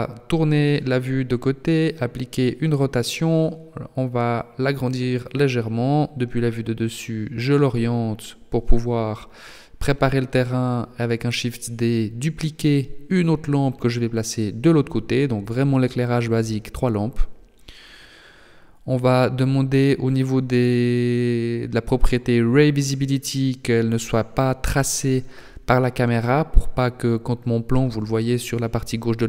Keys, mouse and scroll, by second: 0.3 g, 1.5 r, 2.8 s, 4.5 KP_7, 5.7 r, 7.3 g, 9.9 shift+d, 12.5 r, 13.9 g, 16.6-17.3 scroll down 8, 19.1 click, 19.3-20.2 scroll down 2, 20.5 click, 21.2 right click, 21.8 right click, 22.7 click, 23.6 right click, 24.3 g, 26.1 r, 27.8 middle click.